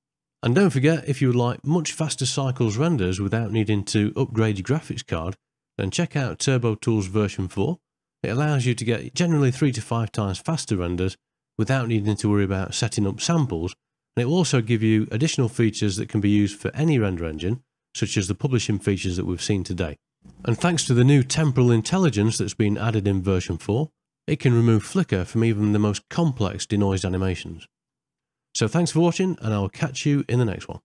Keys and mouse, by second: 1.3 middle click, 2.0 middle click, 3.0-5.0 shift+middle drag, 7.8 middle click.